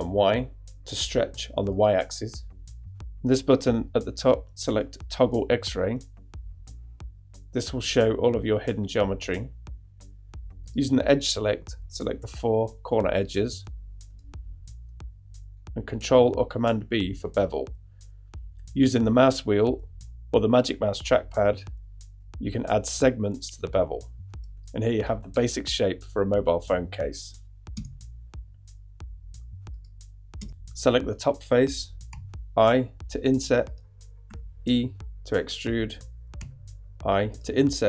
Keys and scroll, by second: 15.7 super+b, 27.8 Tab, 30.4 Tab, 32.1 i, 34.3 e, 36.4 i.